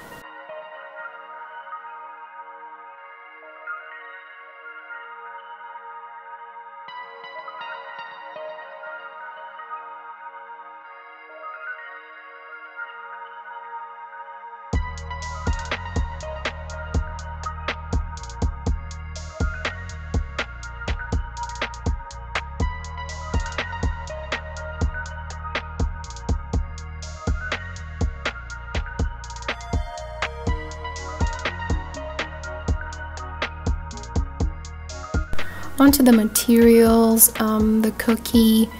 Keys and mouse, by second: 3.4 click, 4.5 click, 5.3 click, 9.5 shift+a, 14.1 r, 14.2 x, 19.0-20.2 drag, 20.2 r, 20.3 z, 23.2 click, 31.4 click, 34.6 click.